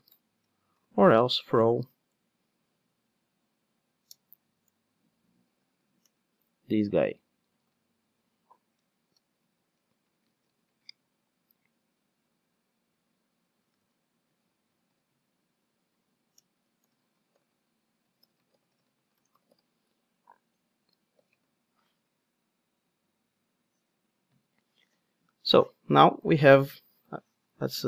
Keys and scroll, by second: 7.5 super+c, 10.8 super+c, 10.9 super+v, 14.8 alt+super+l, 26.5 ctrl+alt+o.